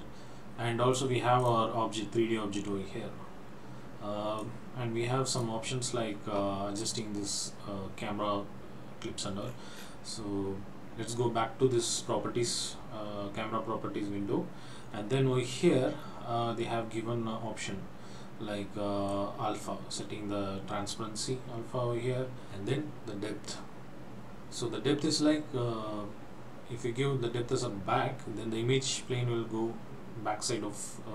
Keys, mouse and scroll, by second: 4.6 click, 9.5-10.0 scroll down 8, 14.9 scroll down 1, 15.0 scroll up 1, 15.7-17.9 scroll down 2, 19.1 click.